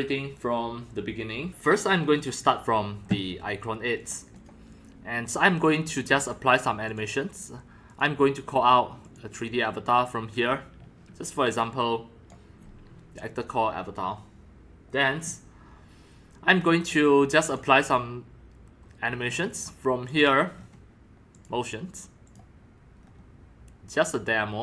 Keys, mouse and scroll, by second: 1.5-3.1 drag, 4.0 click, 4.4 click, 5.6 click, 6.2 click, 6.9 click, 7.9 click, 9.0 click, 11.5 click, 12.3 click, 12.5-14.9 drag, 15.2 scroll up 1, 15.5 click, 15.5 scroll down 1, 15.6-17.4 drag, 17.5 click, 17.6-19.2 drag, 19.2-19.7 scroll down 5, 19.7 scroll, 20.1 click, 20.5 scroll down 3, 21.3 click, 22.3 click, 23.0-23.4 scroll down 4, 23.9 scroll, 24.2-24.6 scroll down 1.